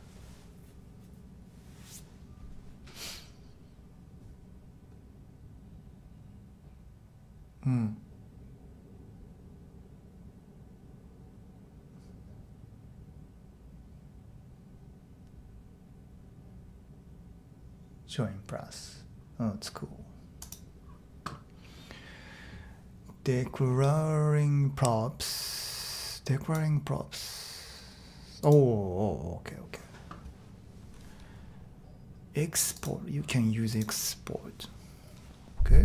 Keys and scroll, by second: 35.7-35.8 typing.